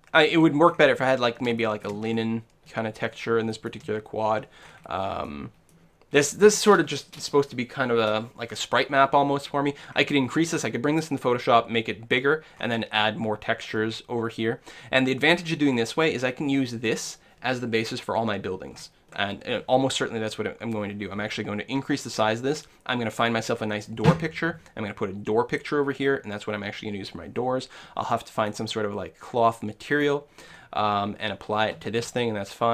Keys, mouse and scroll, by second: 0.3-7.1 middle drag, 9.4 click, 9.8-11.9 middle drag, 11.9 click, 12.6 middle click, 13.6 click, 13.8-15.8 middle drag, 15.8-17.7 drag, 18.4-21.1 middle drag, 21.2-25.5 middle drag, 26.2 middle click, 26.7-32.7 middle drag, 31.9-32.7 scroll down 1.